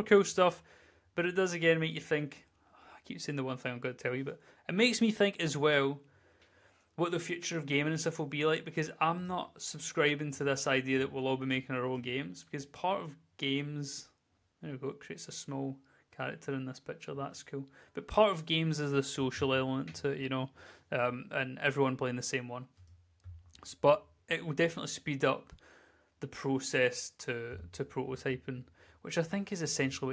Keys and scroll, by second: 10.8 d, 15.2 d, 28.5 w, 28.6 w, 29.0 w, 29.8 d.